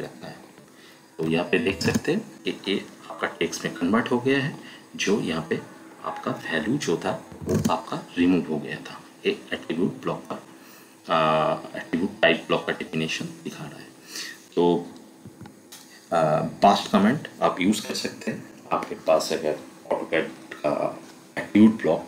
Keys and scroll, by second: 1.4-2.3 typing, 7.4 l, 7.5 space, 15.3 Escape.